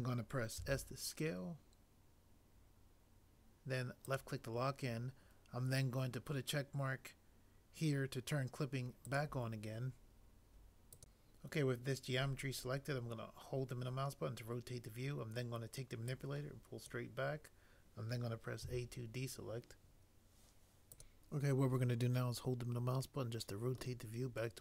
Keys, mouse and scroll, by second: 0.5 s, 18.7 a.